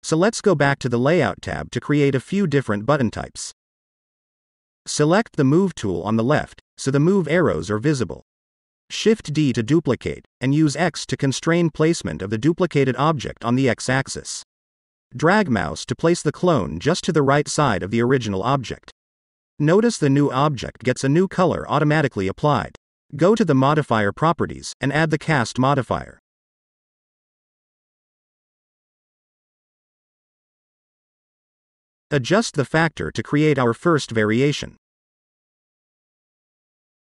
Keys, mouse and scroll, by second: 0.0 click, 0.0 scroll down 1, 0.4-1.2 scroll down 3, 1.2 middle click, 2.1 KP_1, 3.3 click, 4.8 click, 8.3-8.6 scroll down 1, 8.6-9.4 middle drag, 10.2 shift+d, 10.4 x, 21.0 click, 22.3 click, 23.9 click, 24.7 click, 25.1-30.0 drag, 30.6-32.1 scroll up 3, 32.2-32.8 shift+middle drag, 33.1-33.6 scroll up 2, 33.6-34.7 middle drag, 36.1-37.1 drag.